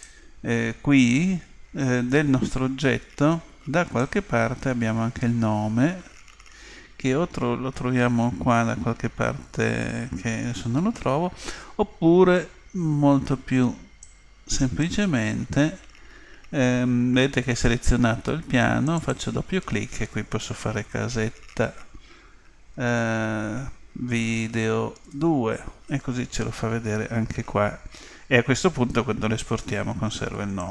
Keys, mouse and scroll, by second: 4.0-5.8 drag, 14.0-15.8 drag, 18.8-21.0 drag, 21.2 t.